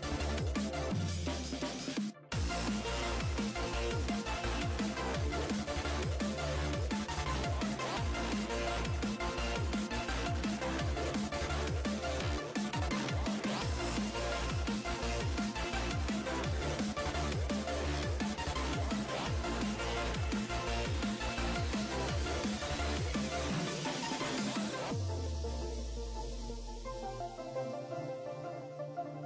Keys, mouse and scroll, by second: 6.6-9.8 drag, 15.5-18.8 middle drag, 27.1 scroll up 4, 27.6 scroll up 1, 28.0-28.4 scroll down 5.